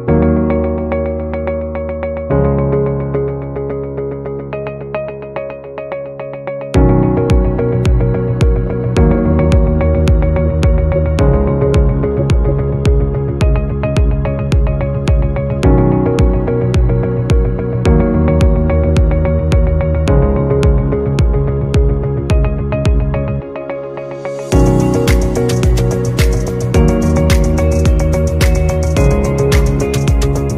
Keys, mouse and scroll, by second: 1.7-5.6 typing, 2.3 Right, 8.0-13.6 typing, 16.9-17.9 scroll up 1, 18.5-19.5 typing, 22.5-23.2 typing, 23.9 alt+scroll up 1, 27.5 double click, 28.5 BackSpace, 29.7 typing.